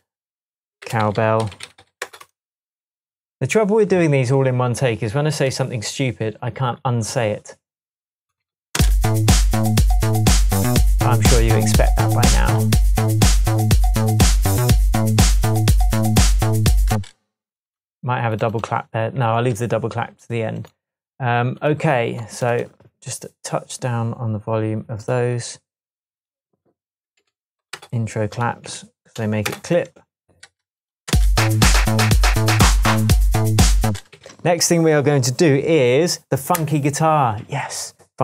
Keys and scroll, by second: 0.8-2.2 typing, 8.8 space, 16.9 space, 27.1 typing, 27.8 Return, 28.7 -, 29.2 2, 29.5 Return, 31.1 space, 33.0 shift+Tab, 33.9 space, 34.2 s.